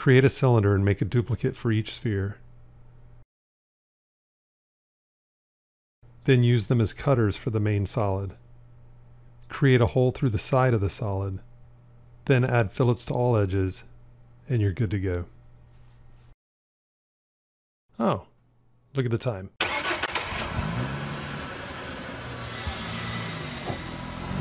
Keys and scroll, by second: 9.0 q, 11.5 q.